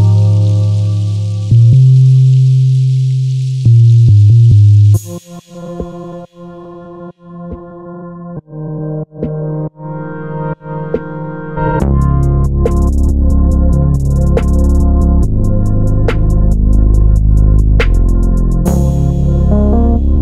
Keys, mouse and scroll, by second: 0.3 shift+right click, 0.5-2.0 middle drag, 1.3 KP_1, 2.0 shift+right click, 2.3 scroll up 1, 2.6-9.1 shift+middle drag, 2.9-3.4 scroll up 1, 3.4 shift+a, 4.8 r, 7.6 KP_Enter, 7.9 s, 9.1 click, 9.3 Tab, 9.5 scroll up 1, 10.0 1, 10.2-12.3 drag, 12.9-15.6 drag, 14.5 g, 16.0 click, 16.5 g, 17.4 click, 17.9 Tab, 18.1-20.2 middle drag, 18.5-19.6 scroll down 2, 19.6 g.